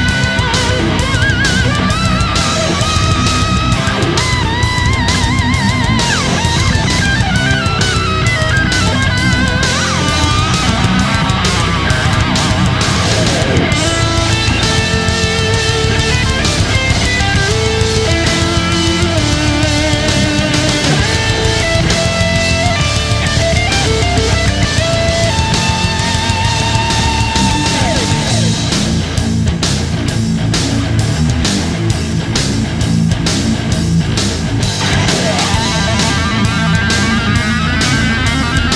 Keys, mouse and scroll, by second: 1.0 ctrl+alt+click, 6.7 click, 36.3 click.